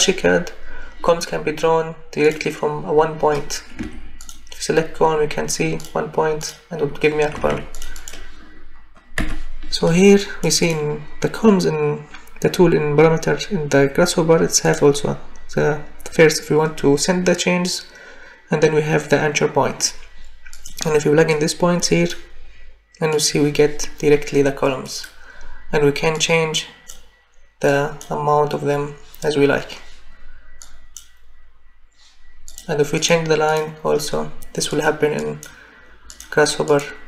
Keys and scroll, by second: 3.8 Escape, 7.3 Escape, 9.2 Delete.